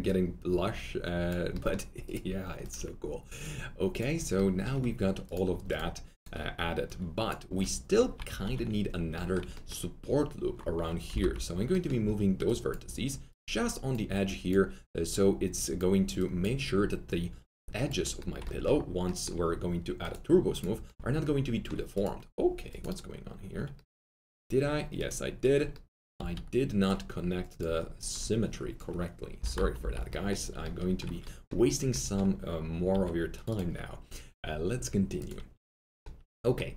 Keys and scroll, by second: 8.4 alt+q, 11.0-12.5 typing, 26.1 4, 29.4 ctrl+i, 29.8 Delete.